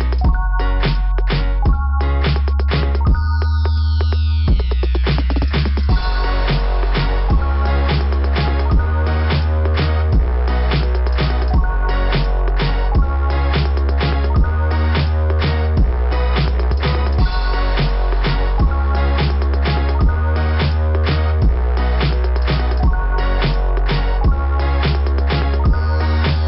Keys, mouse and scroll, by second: 0.1 click, 1.0 scroll down 1, 1.3 scroll up 2, 4.5 click, 4.7 click, 10.8 click, 11.0 click, 15.9 click, 16.0 click, 19.5 scroll up 2, 22.4-22.7 scroll down 2, 23.7 scroll up 2, 26.2 click.